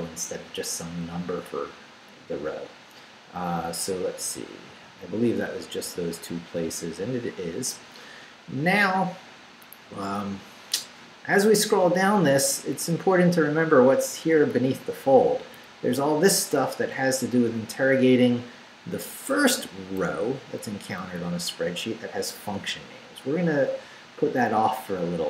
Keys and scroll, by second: 4.3 n, 10.5 Down, 12.3 Down, 17.6 Up, 20.6 Up, 21.2 Down, 24.6 Down.